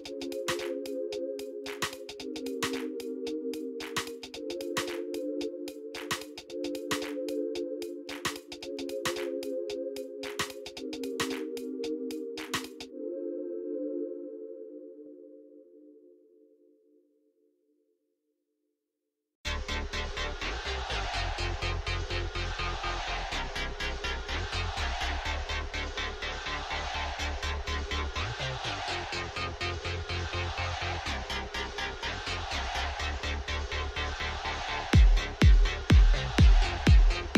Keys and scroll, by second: 1.2 Tab, 1.7 Tab, 2.0 m, 2.8 o, 2.9 u, 3.0 e, 4.0 Tab, 5.7 Escape, 5.9 alt+a, 6.2 c, 6.6 Return, 7.0 g, 8.0 g, 8.1 z, 8.9 g, 9.0 z, 10.2 g, 10.6 z, 11.5 Tab, 13.1 Tab, 13.5 ctrl+z, 14.1 Tab, 14.4 alt+a, 19.5 shift+d, 19.7 shift+z, 20.5 g, 20.6 z, 23.3 z, 24.1 g, 24.2 z, 24.9 r, 29.6 Tab, 31.1 Tab, 31.9 Tab, 34.9 Tab.